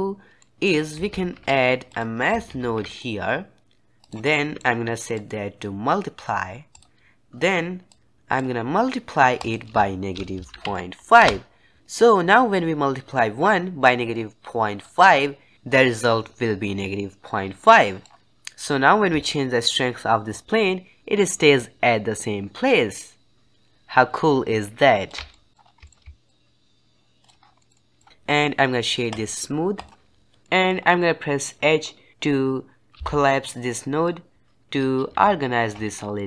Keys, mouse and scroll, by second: 0.3-1.0 middle drag, 1.0 shift+a, 4.2-5.0 middle drag, 5.0-11.8 drag, 17.7-18.2 middle drag, 19.1-22.1 shift+drag, 25.2-25.6 middle drag, 25.6 scroll down 2, 25.8 shift+middle click, 26.2-27.2 shift+drag, 27.4 scroll down 3, 27.5 middle click, 28.1-29.0 scroll up 1, 29.0-30.4 right drag, 30.4 middle click, 30.7-31.6 scroll up 4, 32.9 h, 34.0-35.9 drag, 35.9 scroll down 2, 36.1 middle click.